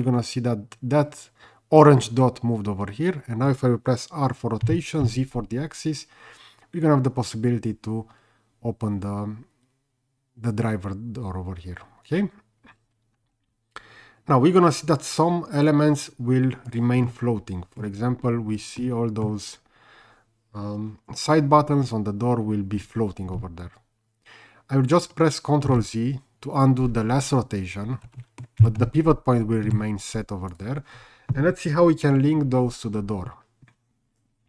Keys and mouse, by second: 4.6 r, 5.0 z, 16.7 click, 17.0-17.8 middle drag, 18.8-19.2 middle drag, 25.8 ctrl+z, 28.1 middle click, 28.6 r, 28.9 z, 29.6 Escape, 30.5 click.